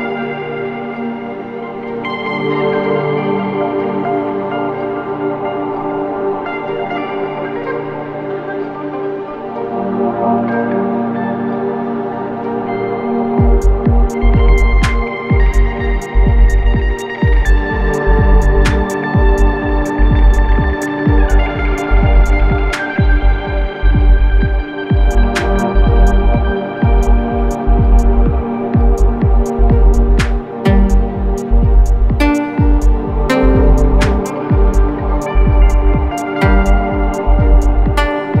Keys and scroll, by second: 4.1 ], 4.4 Delete, 5.9 f, 11.4 ], 12.9 4, 13.4 3, 15.2 ctrl+z, 25.5 ], 32.1 4.